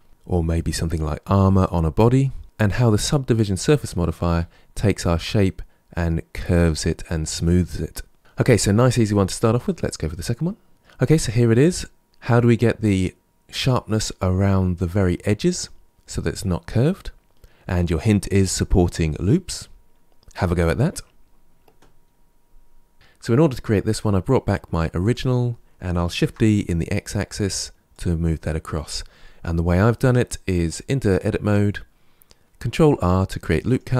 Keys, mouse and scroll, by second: 2.4 Tab, 4.2 Tab, 10.7-11.4 middle drag, 11.6-14.6 middle drag, 24.9 click, 26.0 shift+d, 29.9 Tab, 32.5 ctrl+r.